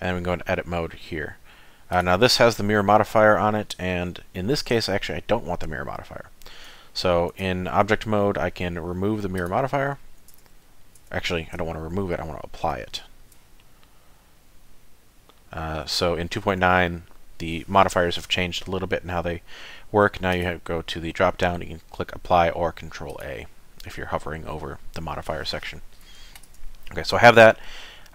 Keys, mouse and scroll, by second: 0.2 middle click, 1.9 click, 7.4 Tab, 9.4 click, 10.3 Tab, 11.0 Tab, 12.0 ctrl+z, 12.3 ctrl+z, 12.9 ctrl+z, 20.3 click, 25.9 middle click, 26.5 Tab.